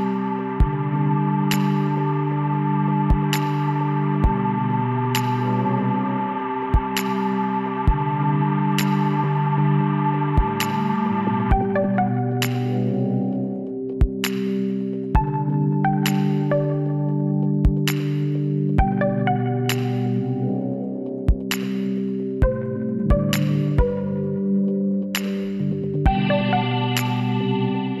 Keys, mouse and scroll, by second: 0.1-0.5 scroll down 1, 1.5 z, 2.5-4.2 middle drag, 5.1 Tab, 9.9-11.7 middle drag, 11.7-13.4 drag, 13.6 a, 14.2 a, 15.7 Tab, 16.3 Tab, 16.8 a, 18.7 Tab, 21.8 click, 21.8-25.0 middle drag, 25.0 KP_1, 25.3-26.5 middle drag, 26.7 middle click, 27.2-28.0 middle drag.